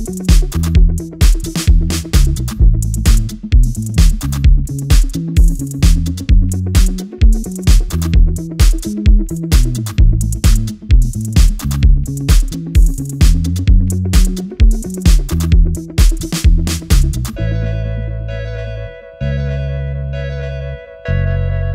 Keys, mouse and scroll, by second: 1.9 typing, 4.8-7.6 drag, 6.6-9.0 typing, 7.8 click, 8.2 click, 8.6 click, 9.7-15.5 drag, 16.2 Return, 16.7 alt+scroll down 1, 17.9 click, 19.2 alt+scroll down 1, 19.4 alt+scroll up 1, 19.4 alt+scroll down 1, 19.7 space, 19.9 click, 20.4-21.2 alt+scroll up 1, 21.2-21.7 scroll down 1.